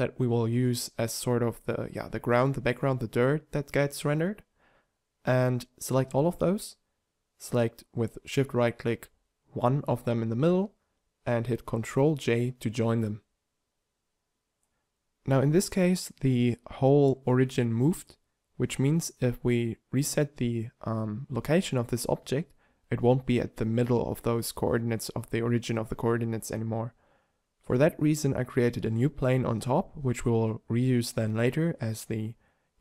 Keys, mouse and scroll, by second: 1.3 middle click, 2.9 middle click, 3.7-5.3 drag, 5.3-6.3 middle drag, 6.4 a, 6.6 z, 7.0 b, 8.1-9.5 drag, 9.5 ctrl+j, 11.3 t, 11.7 t, 14.7 z, 16.1 alt+g, 18.7 alt+g, 21.1 shift+a, 23.1 alt+g, 24.5 g, 26.1 Tab, 27.5 shift+Tab, 27.8 g.